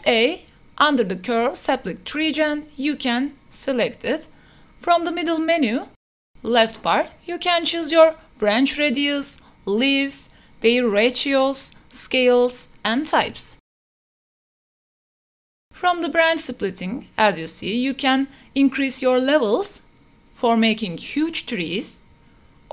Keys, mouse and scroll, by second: 4.0-4.4 middle drag, 5.0 shift+middle click, 5.2 middle click, 7.0-9.4 drag, 11.9-15.0 drag, 15.9-22.0 drag, 22.5 click.